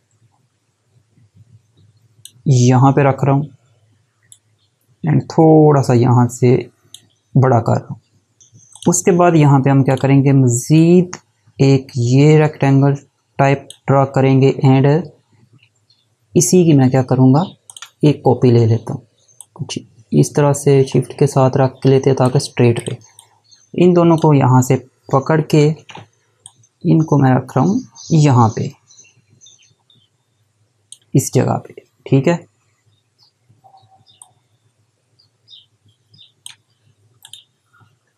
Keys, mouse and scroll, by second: 17.3 click, 19.0 click, 22.4 click, 26.0 click, 33.8 click.